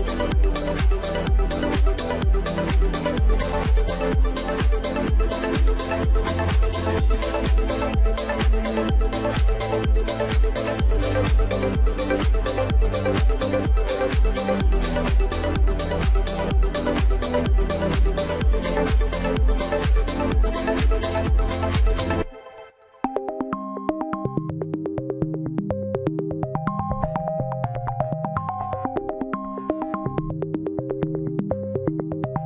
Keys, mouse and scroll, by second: 0.2-1.6 middle drag, 1.7 click, 2.1 alt+shift+click, 2.6 alt+shift+click, 2.9 middle click, 3.7 alt+shift+click, 4.1-5.1 middle drag, 5.1 alt+shift+click, 5.6 alt+shift+click, 6.4 ctrl+b, 8.3 Tab, 8.5 scroll down 4, 8.7-9.9 middle drag, 10.2 scroll down 5, 10.5 click, 10.9 click, 11.2-11.8 middle drag, 11.8 scroll up 3, 12.2-13.4 middle drag, 14.0 scroll up 2, 14.2-14.8 middle drag, 14.8 scroll up 1, 14.9 middle click, 15.2 Tab, 15.5 click, 15.7 Tab, 16.3 click, 16.7 click, 16.9 click, 17.2 click, 17.6 click, 18.0 click, 18.4 alt+shift+click, 19.4 click, 20.0 click, 20.9 click, 21.9 click, 22.8 alt+shift+click, 23.5 alt+shift+click, 24.3 scroll down 3, 24.7-28.6 middle drag, 28.6 click, 29.8 KP_1, 31.0-31.9 scroll up 1, 31.9-32.4 scroll up 1.